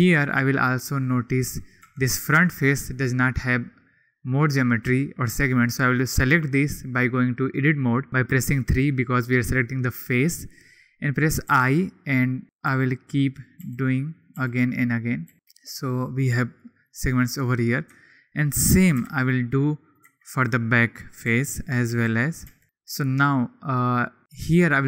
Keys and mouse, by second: 1.8 3, 11.4 i, 12.6 i, 13.6 i, 14.1 click, 14.3 i, 14.8 click, 15.3 i, 16.8 click, 17.8 Tab, 18.9 /, 19.2-19.9 drag, 20.0 Tab, 20.4 click, 21.2-22.6 typing, 22.2 click, 24.5-24.8 drag.